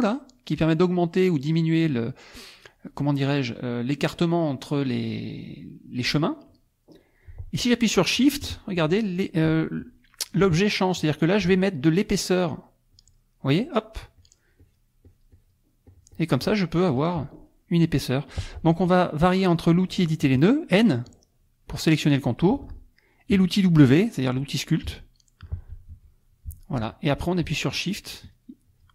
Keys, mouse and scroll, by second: 12.9 shift+click, 13.4 shift+click, 14.2 shift+click, 14.6 shift+click, 15.1 shift+click, 15.9 shift+click, 16.9 shift+click, 17.5 shift+click, 20.7 n, 21.7 click, 24.9 w, 28.1 shift+click, 28.7 shift+click.